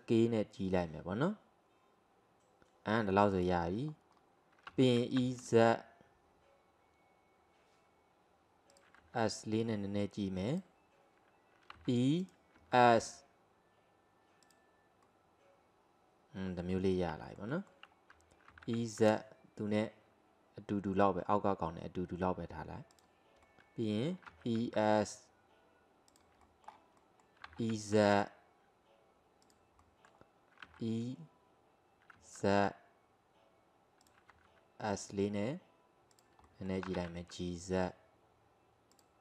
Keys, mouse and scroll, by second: 3.9 scroll up 1, 4.1-4.7 scroll down 2, 4.7 e, 9.0 s, 11.8 e, 12.6 s, 15.1-17.3 middle drag, 18.5 e, 23.5 middle click, 24.3 e, 26.5-27.5 middle drag, 27.5 e, 29.9 middle click, 30.7 e, 34.4 s, 36.5 middle click, 36.9 g.